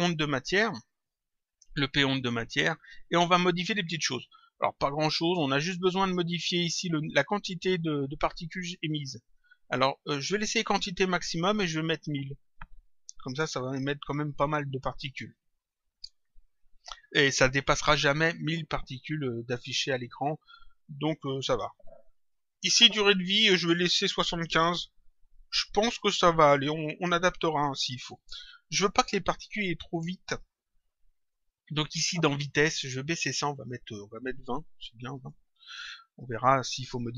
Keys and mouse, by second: 1.1 click, 2.8 click, 12.1 click, 15.1 click, 21.2 click, 33.1 click, 36.6 click.